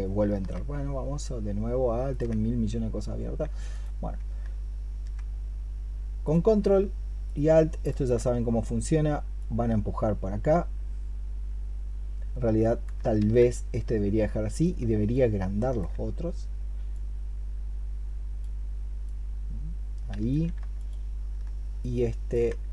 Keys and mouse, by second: 0.2 alt+Tab, 1.9 alt+click, 3.5 ctrl+click, 6.0 alt+click, 7.0 ctrl+click, 13.0 ctrl+z, 14.4 ctrl+click, 20.6 ctrl+click.